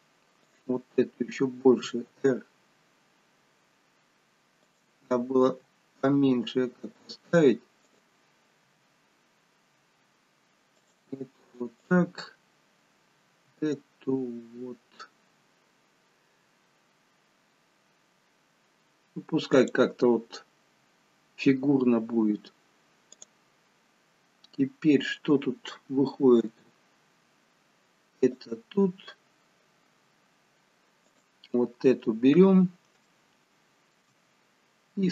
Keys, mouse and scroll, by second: 0.4 click, 1.7 r, 5.4 g, 7.8 click, 8.6 g, 11.8 click, 13.3 r, 23.2 click, 26.6 g, 31.0 click, 32.0-32.5 scroll down 3, 33.0 shift+middle click.